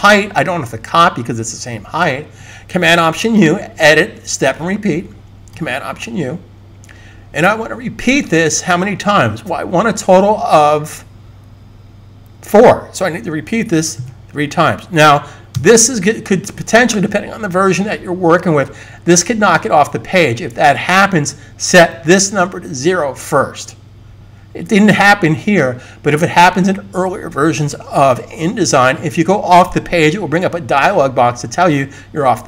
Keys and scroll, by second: 13.7 3, 15.6 3.